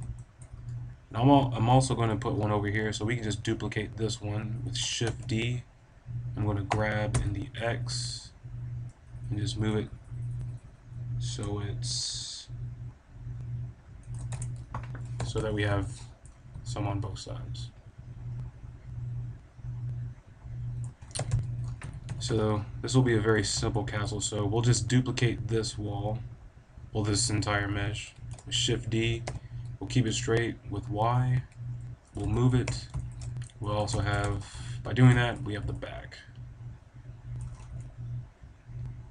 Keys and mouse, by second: 1.5 right click, 1.8 middle click, 5.0 shift+d, 14.1-15.2 right drag, 14.3 a, 15.1 KP_5, 15.3 z, 16.3-17.5 middle drag, 17.6 click, 18.0 click, 20.7 middle click, 21.1 KP_7, 21.2 KP_5, 21.7 z, 22.0 b, 28.1 shift+d, 32.1 click, 32.6 KP_5, 33.5-36.8 drag, 33.6 a, 34.2 z, 37.1 click, 37.5 middle click, 38.3-39.1 middle drag.